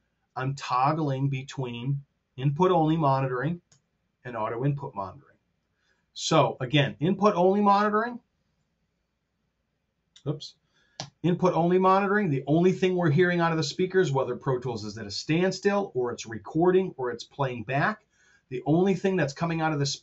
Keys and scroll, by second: 3.6 alt+k, 7.2 alt+l, 8.5 alt+l, 10.8 alt+k.